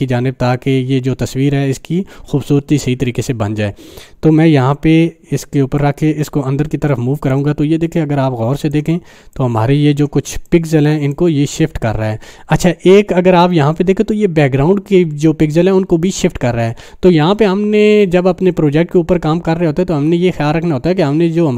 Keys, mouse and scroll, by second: 5.8-6.4 drag, 8.0-8.8 drag, 9.5-10.2 click, 10.2 space, 10.4 click, 10.7-11.4 space, 11.5 space.